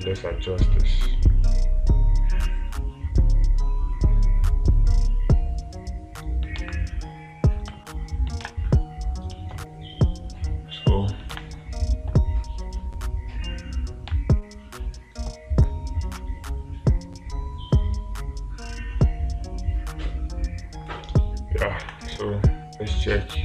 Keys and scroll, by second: 7.1 space, 8.9 space, 11.8 space, 14.6 space.